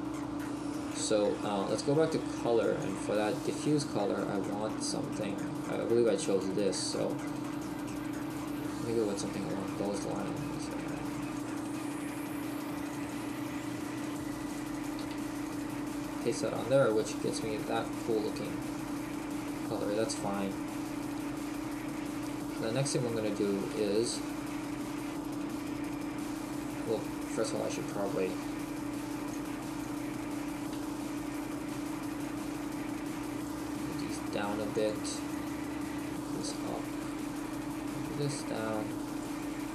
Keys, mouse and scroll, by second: 20.2 shift+middle click.